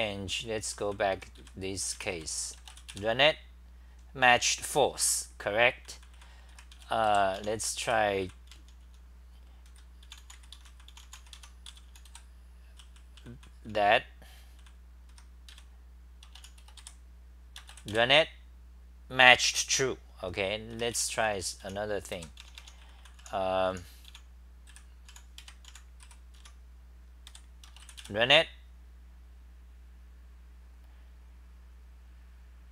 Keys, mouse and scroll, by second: 0.5-2.6 typing, 4.8-16.8 typing, 16.8 Delete, 17.9 Delete, 20.5-26.2 typing, 27.3 Home, 27.3 3, 28.0 BackSpace.